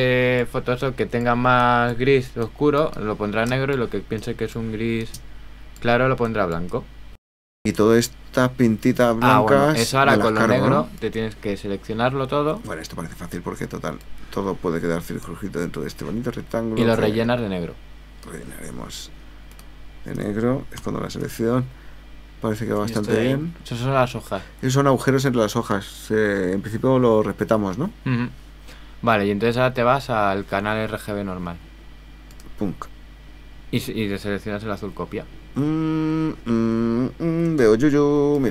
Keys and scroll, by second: 7.1 super+-, 20.8 super+h, 37.6 super+space.